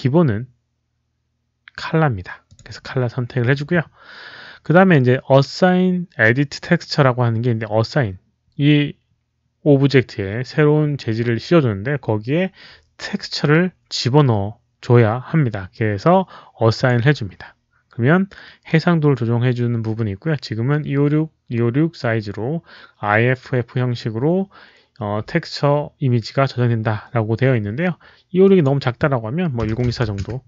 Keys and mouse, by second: 2.4 click, 4.5 click, 16.7 click, 20.5 click, 28.3 click, 29.5 click, 29.5 KP_1, 29.6 KP_0, 29.7 KP_2, 30.0 KP_4, 30.1 Return.